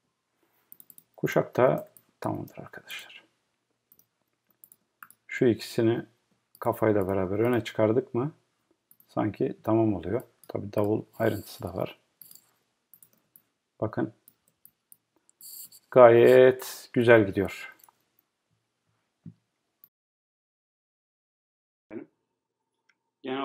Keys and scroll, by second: 0.0 Right.